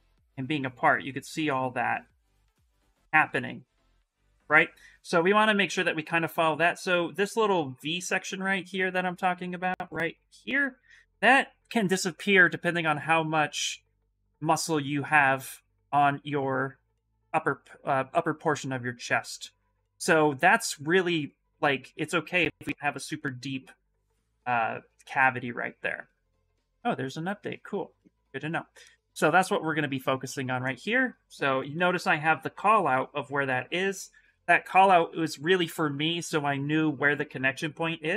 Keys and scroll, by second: 32.7 s, 34.2 shift+f, 34.4 shift+f.